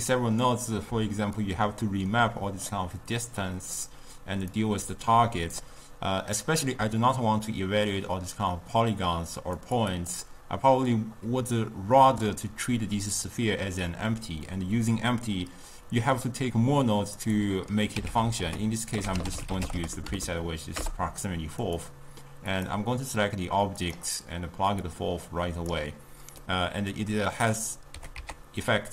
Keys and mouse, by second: 1.5-3.5 drag, 3.5-4.6 middle drag, 4.6-7.7 drag, 9.7 click, 10.0-13.0 drag, 17.3 click, 18.0 x, 18.4 ctrl+a, 22.6 click, 24.9-26.5 drag, 26.5-28.0 middle drag, 28.0 g.